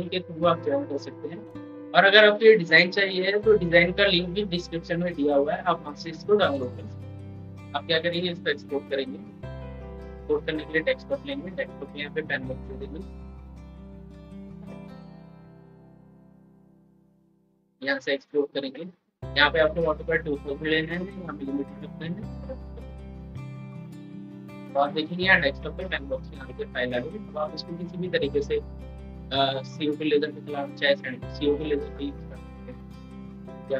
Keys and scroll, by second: 8.6 ctrl+e.